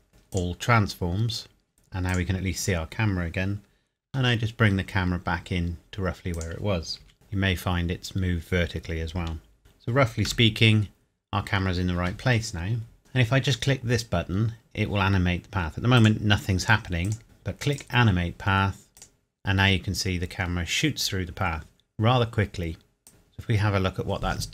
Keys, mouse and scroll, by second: 0.3 click, 1.1-1.5 scroll up 1, 2.1 click, 4.0 g, 6.3 click, 7.0 KP_Decimal, 7.1 KP_1, 7.3-7.8 scroll down 1, 7.8-8.1 scroll up 1, 9.6 KP_7, 10.5 KP_0, 15.9 click, 17.7 click, 23.1 KP_7, 23.5 scroll down 1.